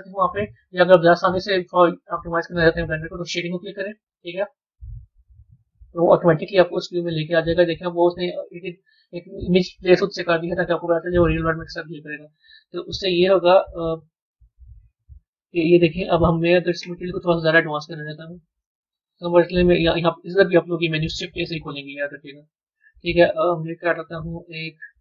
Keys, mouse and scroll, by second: 6.9-18.1 middle drag.